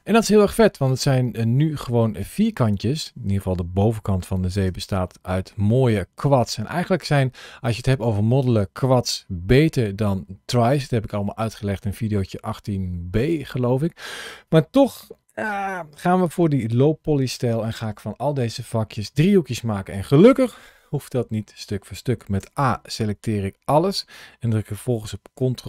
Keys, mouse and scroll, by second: 0.4 scroll down 1, 1.0-1.5 scroll up 1, 1.5 middle click, 4.4 Tab, 4.9 middle click, 6.3 middle click, 22.2 a.